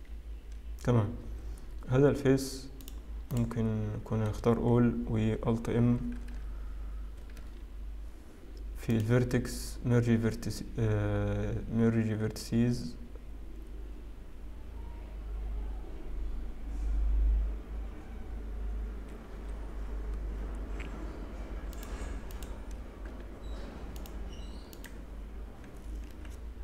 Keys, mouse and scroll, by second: 4.2 click, 4.3 a, 6.1 alt+m, 9.8 click, 21.7 click, 22.4 click, 23.1 x, 25.2 click, 26.5 g.